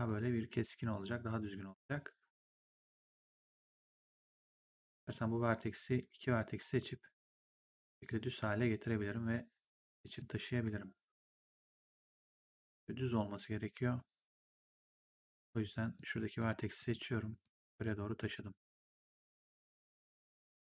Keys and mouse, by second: 2.4 click, 4.9 shift+click, 5.7 shift+click, 6.5 r, 7.1 click, 8.4 w, 9.2 click, 15.2 click, 19.7 click.